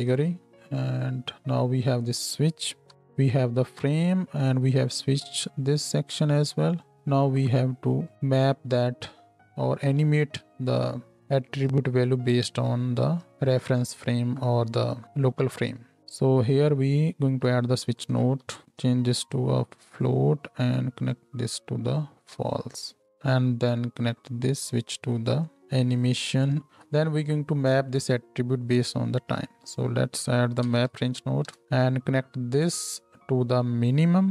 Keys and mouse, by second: 2.9 n, 3.5-8.3 drag, 8.3-13.3 middle drag, 13.3-19.2 drag, 17.2 shift+a, 19.2-26.7 middle drag, 26.7-32.9 drag, 26.7 x, 29.4 shift+a, 32.9-34.3 middle drag.